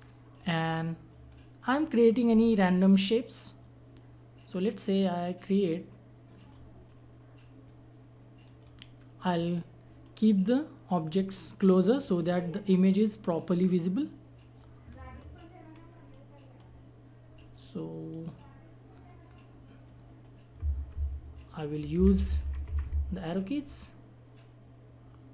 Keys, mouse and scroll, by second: 6.3 right click, 6.9-8.4 drag, 8.4 right click, 9.0 scroll up 1, 10.0 click, 11.3-11.7 scroll down 1, 11.8-12.2 scroll up 1, 12.2-14.9 drag, 14.9 scroll down 1, 16.1-17.5 drag, 17.6-19.2 drag, 19.2 scroll down 1, 19.8 click, 20.9 Left, 22.0 Up, 22.7 Left, 23.3-25.3 drag.